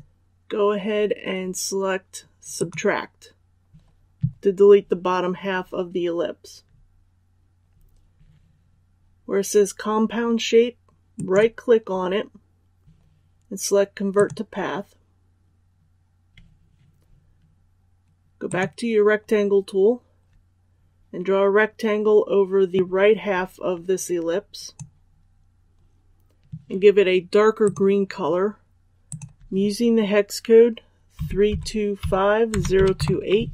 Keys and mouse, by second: 11.0 right click, 14.0-28.7 drag, 31.1-32.9 typing.